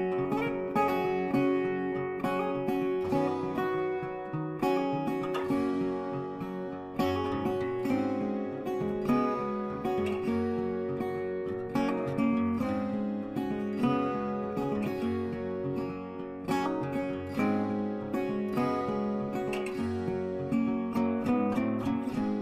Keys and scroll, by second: 17.2 z.